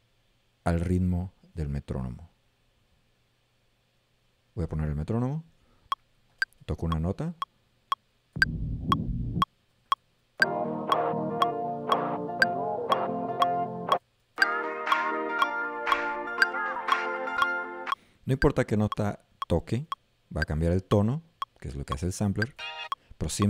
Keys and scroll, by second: 8.4 a, 9.6 x, 14.1 x, 19.9 x, 22.6 a.